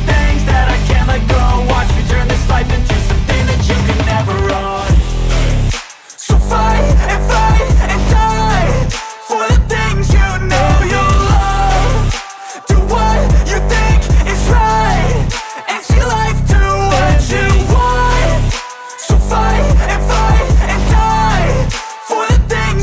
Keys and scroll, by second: 3.5 shift+,, 3.8 ctrl+s, 18.1 BackSpace, 18.6 Delete, 19.1 shift+., 19.8 =, 20.6 Right, 21.0 Delete, 21.5-22.6 typing.